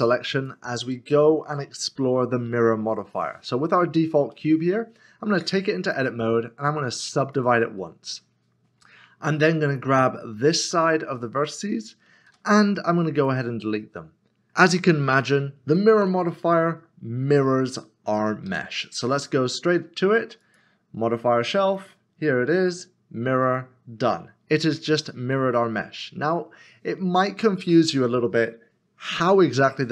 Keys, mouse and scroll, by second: 0.9 middle click, 3.1 click, 3.8 scroll up 1, 4.3 scroll up 1, 4.5 middle click, 5.3 Tab, 5.8 right click, 8.0 click, 8.3 middle click, 9.8 click, 11.1 click, 11.3 middle click, 12.3 x, 13.2 click, 15.7 click, 15.9 middle click, 18.5 Tab, 20.4 click.